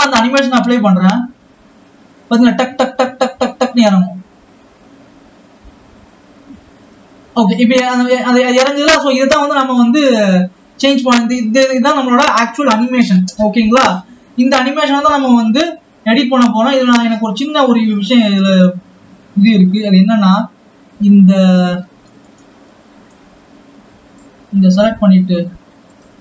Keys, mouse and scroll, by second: 0.0 drag, 0.7 space, 2.9-4.2 scroll up 3, 9.4 space, 10.0 ctrl+s, 11.9-12.7 scroll down 3, 12.7-17.2 scroll down 2, 17.2 click.